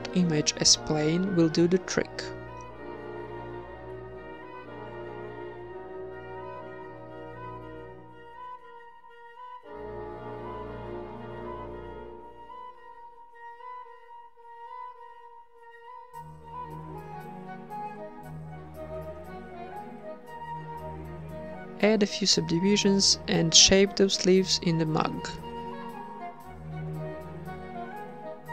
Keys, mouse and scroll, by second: 0.0-1.0 drag, 1.0-3.0 middle drag, 1.4 z, 2.7-4.9 typing, 5.1 middle click, 5.7 Tab, 6.1 w, 7.1 t, 8.7 t, 8.8 Tab, 11.1 click, 14.7-15.4 drag, 15.4-19.6 typing, 18.5 Tab, 20.6 Tab, 20.6 click, 21.5 Tab, 21.6 2, 22.8 w, 23.8 Tab, 24.0 right click, 24.2 Tab, 24.5 Tab, 25.0 z, 26.1 g, 26.9 h, 28.3-28.5 typing.